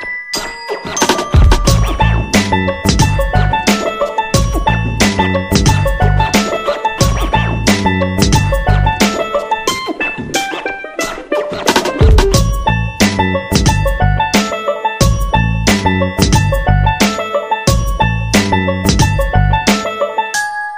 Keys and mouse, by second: 0.0 g, 1.1 right click, 1.3 g, 2.2 right click, 2.3 g, 3.1 KP_3, 3.8 alt+z, 4.4 c, 5.2 g, 6.6 e, 8.1 right click, 8.4 g, 9.7 right click, 9.9 g, 10.8 right click, 12.5 shift+right click, 14.4 middle click, 15.1 alt+z, 15.8 right click, 16.2 KP_1, 16.9 KP_3, 17.8 ctrl+r, 19.0 right click, 19.8 shift+right click, 20.2 g.